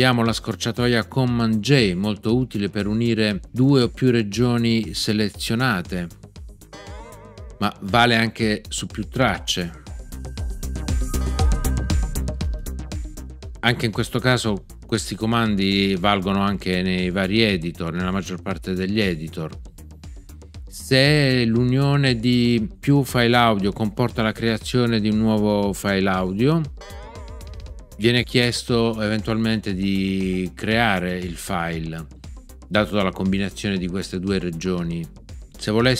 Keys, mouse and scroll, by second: 6.7 super+j, 11.1 super+j, 26.7 super+j.